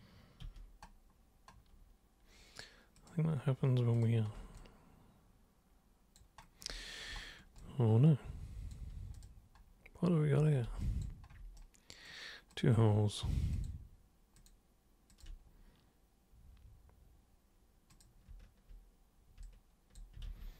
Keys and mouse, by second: 0.5 super+3, 3.0 super+click, 4.0 super+click, 4.6-6.2 alt+super+drag, 7.6-8.7 alt+super+drag, 9.2 super+click, 10.4 super+1, 10.8 alt+super+click, 11.6 super+right click, 12.5 super+click, 13.5 ctrl+shift+super+click, 14.4 ctrl+shift+super+click, 15.1 ctrl+shift+super+click, 17.9 super+click, 19.4-20.0 alt+super+drag.